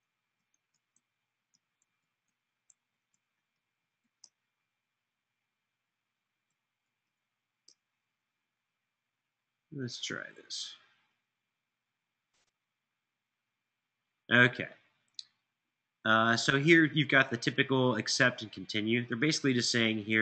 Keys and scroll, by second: 0.0-2.0 typing, 2.4 Tab.